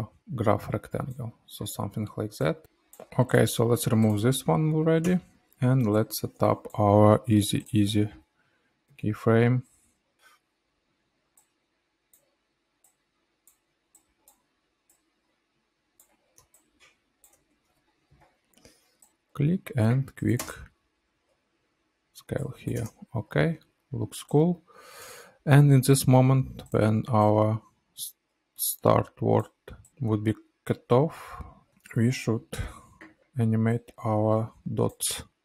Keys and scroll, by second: 2.6 space, 5.0 BackSpace, 11.3 ctrl+z, 11.6 ctrl+z, 11.7 ctrl+z, 12.6 BackSpace, 15.7 space, 18.7 space, 20.3 space, 22.7 space, 32.3 p.